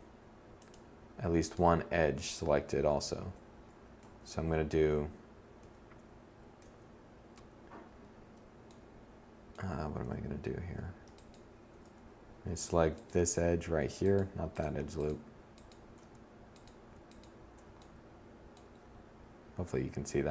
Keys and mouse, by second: 1.4 z, 2.3 Tab, 2.9 Tab, 3.8 Tab, 4.5 z, 5.5 Tab, 19.8 ctrl+e.